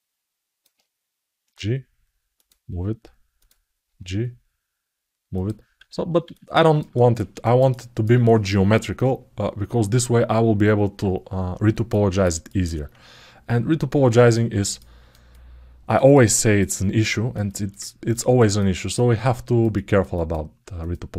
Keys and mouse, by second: 3.1 click, 6.1 alt+middle click, 6.7 ctrl+alt+middle click, 7.2 alt+shift+middle click, 7.5 alt+middle click, 11.6 ctrl+alt+middle click, 12.2 alt+middle click, 14.1 alt+middle click, 14.5 ctrl+alt+middle click, 15.1 alt+middle click, 15.9 alt+shift+middle click, 16.3 alt+middle click, 17.2 alt+shift+middle click, 17.6 ctrl+alt+middle click, 18.1 alt+shift+middle click, 18.7 alt+middle click, 19.5 ctrl+alt+middle click, 20.0 alt+middle click.